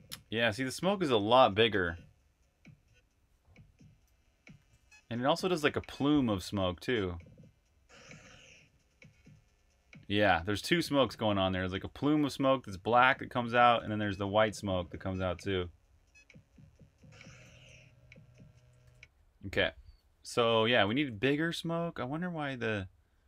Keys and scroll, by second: 4.1-5.3 typing, 6.4 typing, 12.2 h, 13.4-14.8 typing, 18.6 super+q, 20.8 super+`.